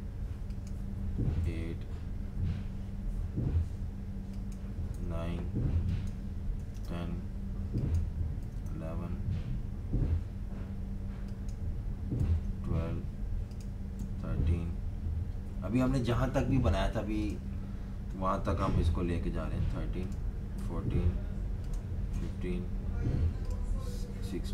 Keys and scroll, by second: 1.4 8, 4.9 9, 6.3-7.2 typing, 8.4 typing, 12.1 typing, 13.9 3, 20.5 4, 22.1 5, 24.2 6.